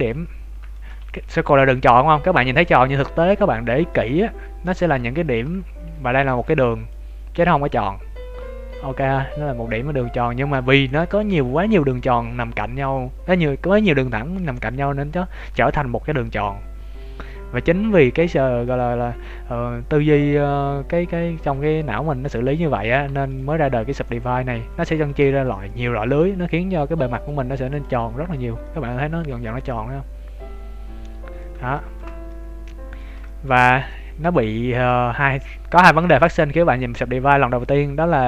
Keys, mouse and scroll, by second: 0.3 scroll down 2, 0.7 shift+middle click, 0.9 Tab, 2.7 Tab, 3.3 scroll up 2, 3.8 scroll up 6, 3.9 shift+middle click, 5.1 right click, 5.7 shift+right click, 6.3 b, 9.7-10.1 scroll down 9, 10.2 Tab, 10.7 shift+middle click, 22.8 scroll down 3, 23.1 x, 24.3-24.9 scroll up 2, 24.7 right click, 24.9 Tab, 25.2 shift+middle click, 25.6 middle click, 27.1 click, 27.8 click, 28.1 scroll up 1, 28.3 Tab, 28.6 middle click, 31.3 scroll up 1, 31.7 shift+middle click, 32.2 middle click, 33.3 shift+middle click, 33.9 middle click, 34.9 middle click.